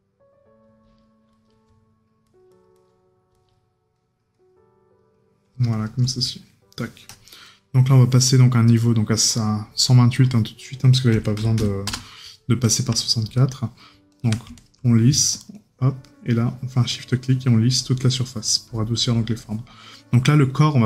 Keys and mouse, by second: 6.3 right click.